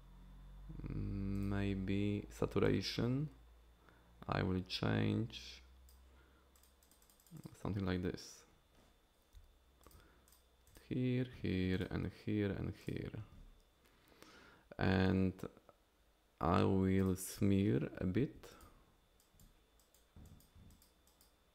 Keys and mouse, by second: 6.5 click, 6.8 click, 7.0 click, 7.2 click, 7.4 click, 9.4 f, 9.9 f, 10.3 click, 10.7 click, 11.7 click, 12.8 click, 17.0 click, 18.4 f, 19.2 click, 19.8 click, 20.3 click, 21.1 click.